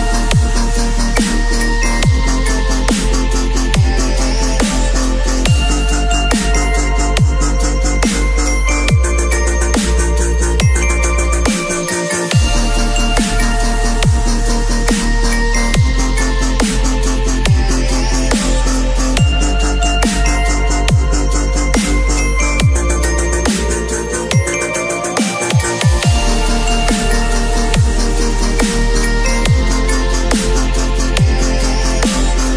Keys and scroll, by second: 1.3 space, 12.7 v, 13.4 ctrl+], 18.0 ctrl+], 22.7 ctrl+], 24.2 ctrl+].